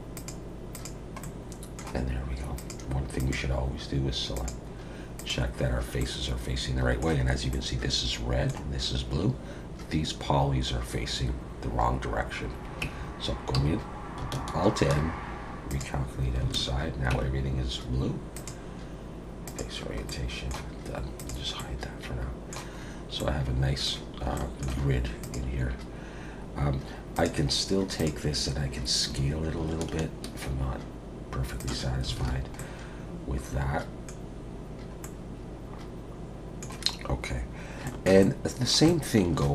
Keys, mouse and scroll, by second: 0.2 click, 0.7 click, 1.2 middle click, 2.6 click, 3.2 click, 5.2 click, 6.0 middle click, 7.5 middle click, 12.8 Tab, 13.6 a, 14.8 alt+n, 16.5 alt+a, 17.1 Tab, 18.3 click, 21.2 click, 21.6 middle click, 22.8-23.3 scroll up 2, 23.2 middle click, 24.3 shift+middle click, 25.2 click, 27.1 click, 28.0 click, 29.1 s, 32.2 alt+a, 32.6 middle click, 34.5-35.0 scroll down 2, 35.0 middle click, 37.5-38.0 scroll down 2, 37.8 shift+middle click, 38.2 middle click.